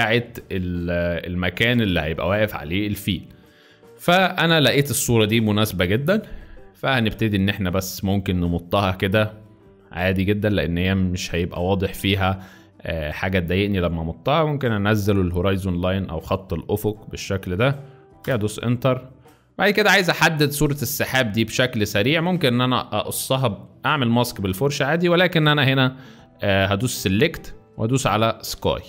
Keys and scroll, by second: 18.3 Return.